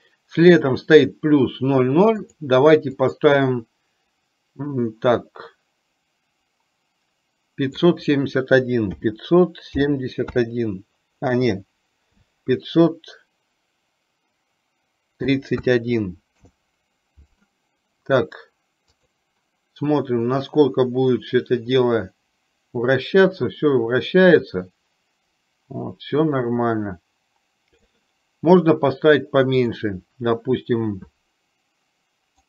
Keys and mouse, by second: 20.6-27.9 drag, 29.7 click.